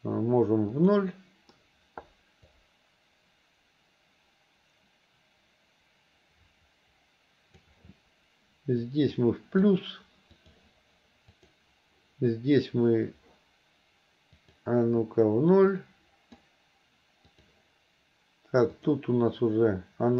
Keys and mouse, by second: 0.8 click, 2.6-7.7 drag, 8.9 click, 10.4 click, 11.5 click, 14.5 click, 15.8 click, 17.3 click, 18.8 click.